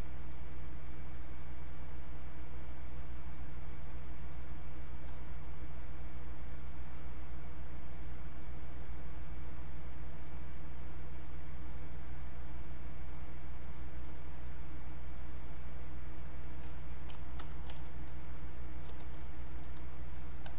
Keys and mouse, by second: 6.8-9.1 drag, 9.1-13.2 drag.